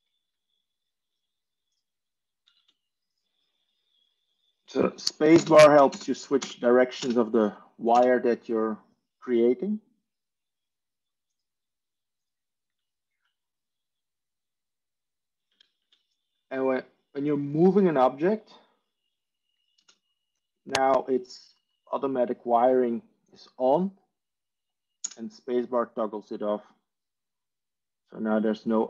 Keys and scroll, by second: 2.9 Tab, 6.5 space, 10.2 space, 15.6 Tab, 15.7 Tab, 19.8 space, 25.0 space.